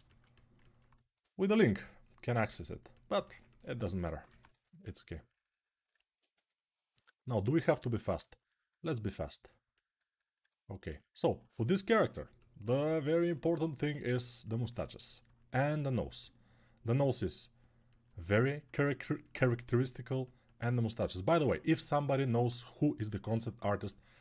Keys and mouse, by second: 0.1-3.7 ctrl+alt+drag, 4.3 1, 6.1 g, 7.9-18.4 right drag.